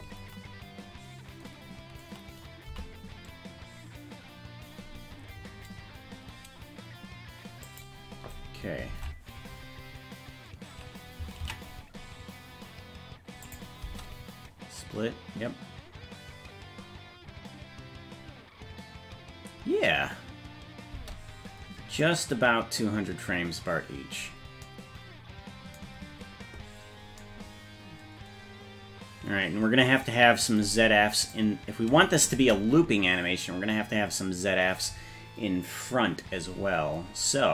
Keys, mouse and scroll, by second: 2.7 g, 8.9 ctrl+Tab, 11.6 ctrl+s, 13.4 click, 13.8 space, 20.9 space, 31.3 click, 32.3 space.